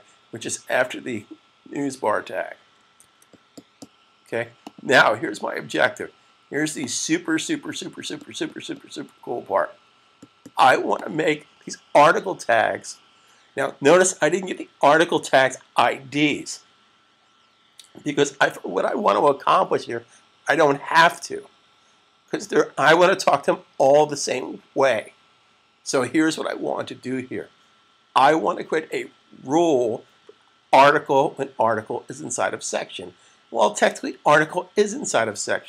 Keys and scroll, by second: 2.9 super+s.